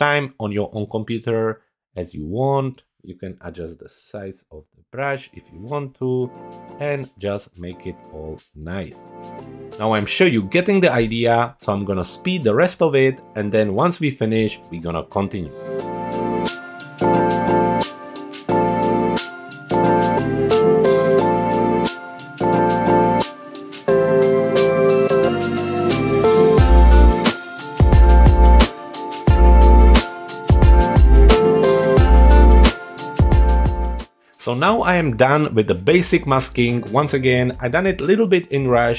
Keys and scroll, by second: 0.0 space, 3.3 [, 6.7 space, 8.7 space, 16.3-22.3 typing, 24.1 space, 24.6 space, 25.1 space, 25.6 space, 26.8 space, 28.1 space, 29.8 x, 30.7 space, 31.4 super+=, 31.7 super+space, 32.8 [.